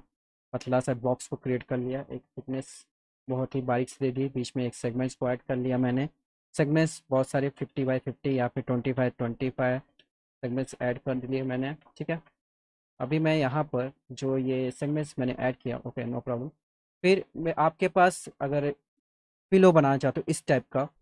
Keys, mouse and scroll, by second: 1.4 middle click, 2.3 f, 2.9 z, 4.6 click, 5.1 middle click, 8.2 click, 9.4 Tab, 9.7 KP_2, 10.0 KP_5, 10.8 scroll up 2, 11.0 alt+middle click, 12.1 F3, 13.0 click, 14.0 click, 15.3 F4, 16.1 click, 16.4 click.